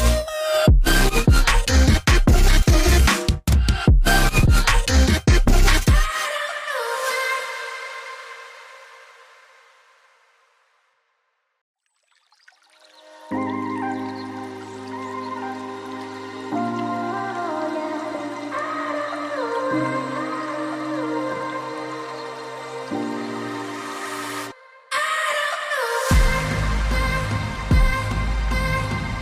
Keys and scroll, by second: 8.0 typing, 8.4 Return.